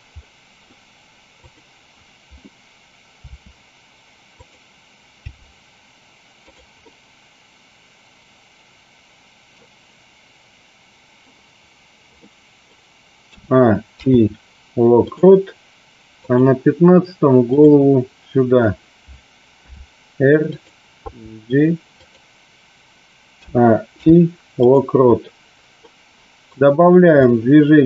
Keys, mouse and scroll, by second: 0.1 middle click, 1.3 click, 4.3 click, 5.2 g, 6.7-9.7 middle drag, 12.2 middle click, 13.8 i, 16.1 click, 20.5 click, 21.1 g, 23.5 a, 23.8 i, 25.8-26.4 middle drag, 27.2-27.8 middle drag.